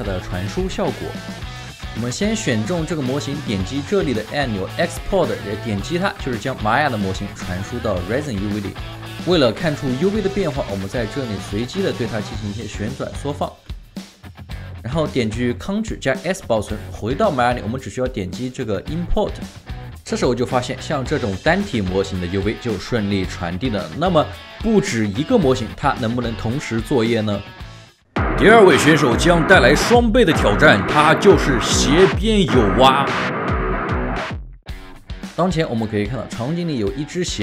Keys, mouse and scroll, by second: 8.9 alt+middle click, 10.4 space, 11.4-11.9 scroll down 2, 11.9 space, 12.1 right click, 12.5 space, 14.1 alt+middle click, 16.4 ctrl+s, 19.8 alt+right click, 20.7 alt+middle click, 21.3 alt+right click, 22.8 alt+right click, 23.3 alt+right click, 23.8 alt+middle click, 26.9 alt+right click, 34.6 ctrl+alt+shift+4.